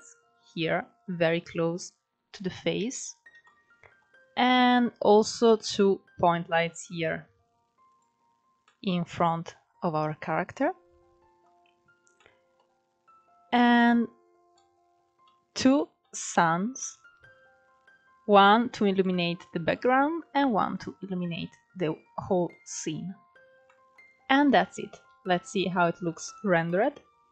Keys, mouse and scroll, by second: 2.0-2.7 scroll down 2, 2.7 scroll down 2, 2.8-3.8 shift+middle drag, 3.8-4.2 scroll down 2, 4.2-4.6 scroll up 4, 4.6-5.1 shift+middle drag, 5.1 scroll up 1, 6.1 click, 7.2 drag, 7.7 scroll down 1, 8.0-11.0 middle drag, 11.0-11.5 scroll down 4, 11.5-12.2 shift+middle drag, 12.2-13.1 scroll up 1, 13.1 click, 13.8 scroll down 2, 13.9-17.7 middle drag, 17.7 drag, 18.1 scroll down 2, 18.3-20.0 middle drag, 20.0 click, 20.4 scroll up 3, 21.4 scroll down 2, 21.8-23.6 middle drag, 22.4-22.9 scroll up 2, 23.6 KP_0, 24.5-27.3 shift+middle drag, 24.5 scroll up 2.